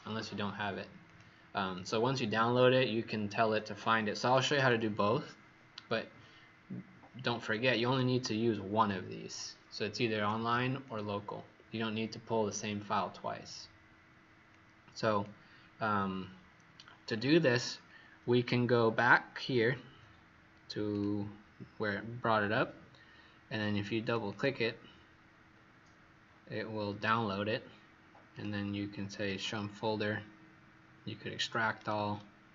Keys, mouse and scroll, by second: 1.7 click, 3.5 click, 24.2 click, 28.3 click.